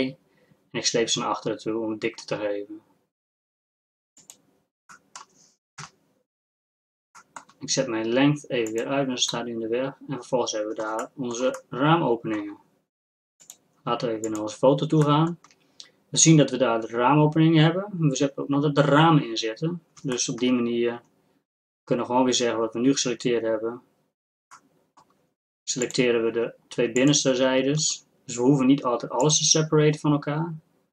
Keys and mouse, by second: 4.9 middle click, 5.9 KP_Divide, 9.5-11.8 drag, 11.8-13.5 middle drag, 17.0-25.9 middle drag, 25.9-28.9 drag, 29.2-30.9 drag.